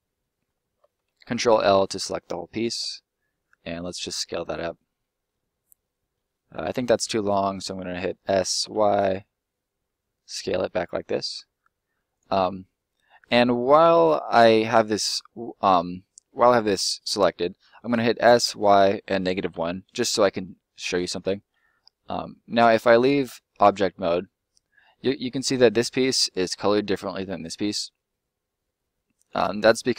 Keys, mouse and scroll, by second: 0.7 ctrl+middle click, 1.0 ctrl+l, 1.8 middle click, 2.8 s, 4.0 click, 4.3 middle click, 4.7 scroll down 1, 5.0 middle click, 6.3 scroll down 1, 6.6 s, 8.6 y, 12.1 click, 12.4 middle click, 17.1 s, 18.4 y, 19.5 1, 20.1 Return, 20.8 middle click, 21.4 middle click, 24.1 middle click, 27.2 middle click.